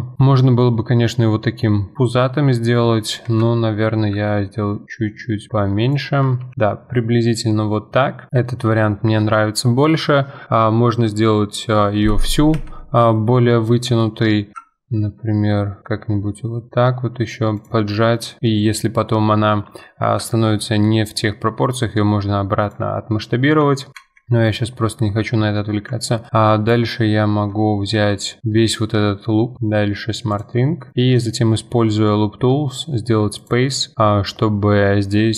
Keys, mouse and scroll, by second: 6.4 ctrl+b, 8.3 middle click, 8.6 scroll down 2, 8.9 middle click, 9.6-10.2 scroll up 2, 10.2-11.6 scroll up 1, 11.6-12.6 scroll up 1, 12.6 a, 12.9-14.5 middle drag, 14.5 s, 17.9-19.1 middle drag, 19.1 Tab, 19.4 middle click, 19.7 Tab, 20.2 s, 22.9-24.0 middle drag, 24.0 2, 24.4 click, 24.9-26.3 middle drag, 26.3 ctrl+click, 27.9 n, 30.3 click, 30.9 middle click, 31.1-33.9 right drag, 34.8-35.3 middle drag.